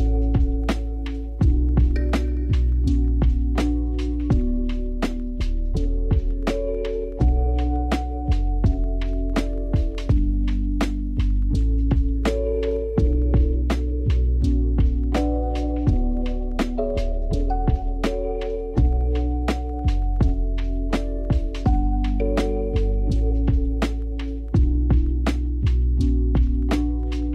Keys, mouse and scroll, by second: 1.7-2.2 scroll up 2, 2.2-3.1 scroll up 4, 3.1 r, 4.0 r, 5.5 r, 7.0 g, 9.0 click, 9.8 click, 11.8-13.3 drag, 13.8-14.8 scroll up 2, 14.8 click, 16.1 click, 17.3-17.7 scroll up 2, 17.7-18.4 scroll down 3, 18.4 click, 19.5-20.5 scroll down 2, 20.5 click, 21.0-22.2 scroll down 4, 22.4-23.4 drag, 23.4-23.9 scroll up 1, 23.9 ctrl+j, 25.9-27.3 drag.